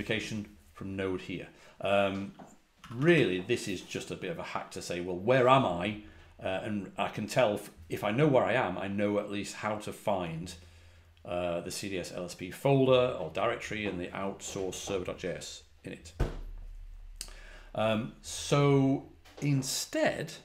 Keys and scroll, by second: 2.7 k, 2.9 k, 3.0 k.